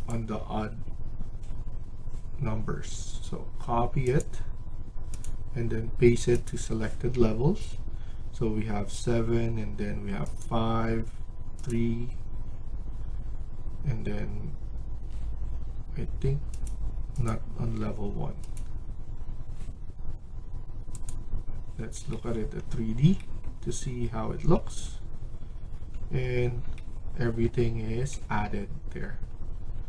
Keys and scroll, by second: 24.3 Escape, 24.5 Escape.